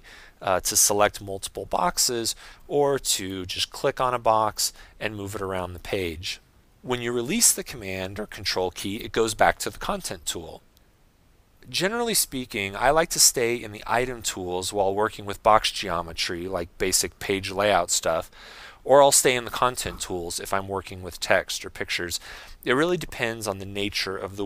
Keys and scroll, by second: 2.1 ↻, 6.6 super+z.